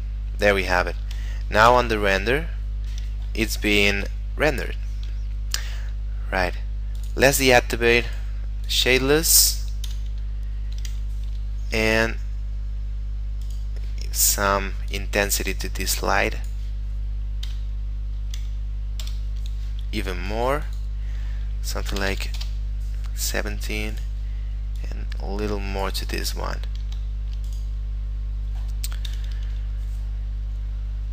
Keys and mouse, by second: 1.7 F12, 4.7 Escape, 7.1 click, 8.0 middle click, 8.8 click, 10.0 F12, 11.4 Escape, 14.9 click, 17.5 F12, 19.0 Escape, 20.3 click, 22.0 1, 22.2 7, 22.4 Return, 24.0 right click, 24.9 click, 26.5 middle click, 27.1 shift+middle click, 27.5 right click, 28.0 KP_Decimal, 29.1 F12.